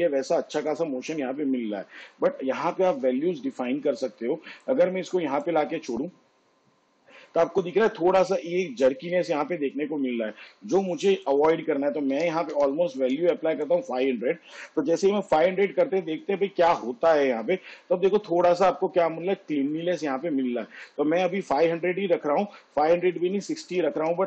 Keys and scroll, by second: 12.2 5, 12.6 0, 23.8 6, 24.0 0.